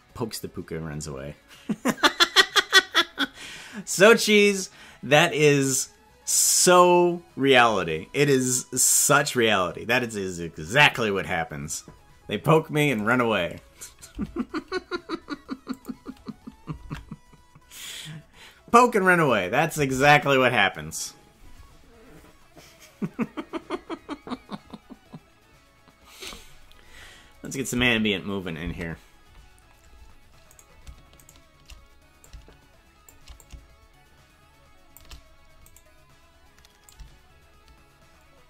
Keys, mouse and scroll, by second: 12.9 right click, 14.1 g, 16.8 ctrl+Tab, 20.0 ctrl+Tab, 27.4 click, 27.8 space, 28.6 space, 30.6 right click, 31.3 shift+right click, 32.2 shift+click, 33.4-35.0 shift+drag, 35.7 right click, 36.8-38.4 shift+drag.